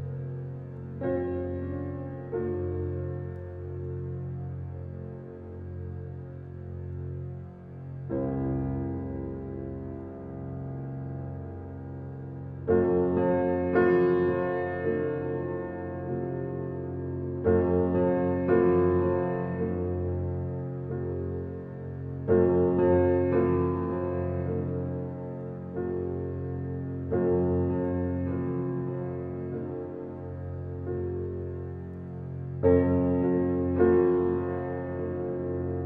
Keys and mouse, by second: 2.8-4.8 drag, 5.1 ctrl+z, 6.2-8.2 drag, 9.2 ctrl+z, 10.5-13.2 drag, 13.7 ctrl+alt+click, 13.8 ctrl+alt+middle click, 13.9 ctrl+alt+click, 14.1 ctrl+alt+click, 16.7-18.9 drag, 20.0 ctrl+z, 21.3-23.8 drag, 25.2 ctrl+z, 26.6-29.7 ctrl+alt+drag, 30.1 1, 30.5 ctrl+alt+click.